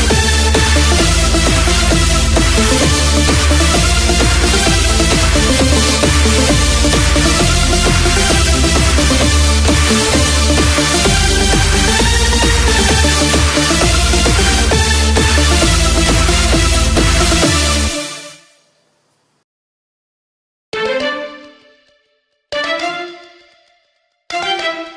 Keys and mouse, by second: 23.3 KP_4, 23.9 KP_4, 24.6 KP_4.